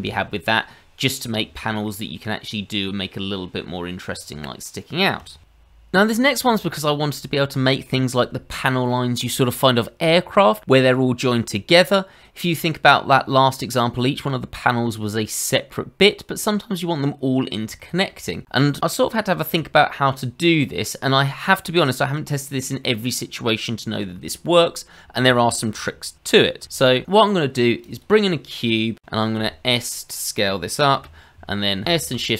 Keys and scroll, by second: 5.6 ctrl+z, 26.6 shift+a, 29.3 s, 30.9 g, 31.8 s.